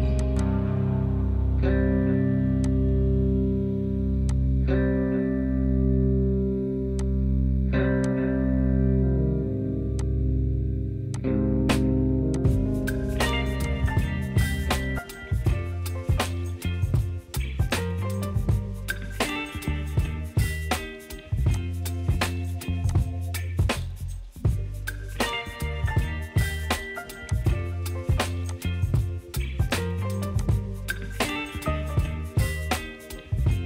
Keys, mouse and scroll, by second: 5.3 click, 12.4 click, 13.8 click, 17.2-19.2 drag, 19.4-21.5 drag, 27.3 right click, 31.8 click.